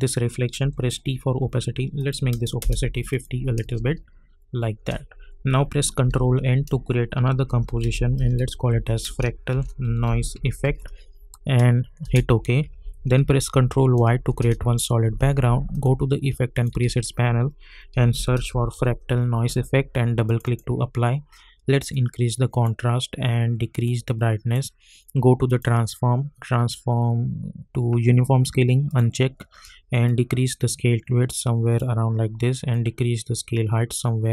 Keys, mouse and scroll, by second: 0.6 t, 2.0 click, 2.6 Return, 3.1 click, 3.6 space, 6.0 ctrl+n, 7.2-11.1 typing, 12.0 Return, 13.3 ctrl+y, 14.4 Return, 15.7 click, 16.8 ctrl+a, 17.7-19.2 typing, 20.2-25.5 drag, 28.9-34.3 drag.